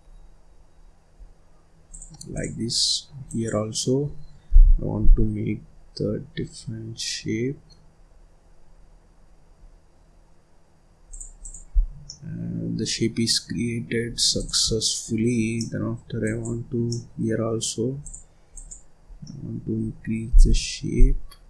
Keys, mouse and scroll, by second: 2.2 click, 3.2-4.4 drag, 4.4 g, 11.3 click, 11.7 scroll down 2, 12.0 middle click, 12.8-13.2 scroll up 2, 13.2-14.3 middle drag, 14.3 click, 14.6 scroll down 1, 14.7 middle click, 15.2-15.5 scroll up 1, 15.5 middle click, 16.2 click, 16.8 middle click, 17.4-17.9 scroll up 2, 17.9 click, 19.0 scroll down 1, 19.2-20.2 middle drag, 20.2 g.